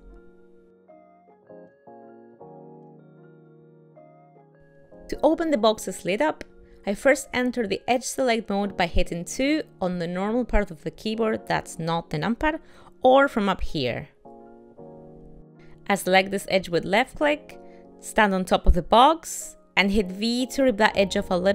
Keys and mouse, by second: 0.1 click, 4.3 w, 4.9 middle click, 7.9 ctrl+middle click, 9.3 2, 15.3 click, 18.9 v.